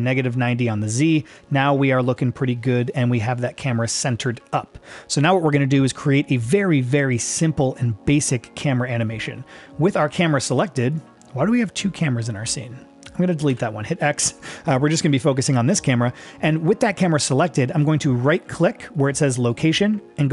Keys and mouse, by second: 1.3 shift+middle click, 10.9 click, 13.5 x, 19.7-20.3 right drag.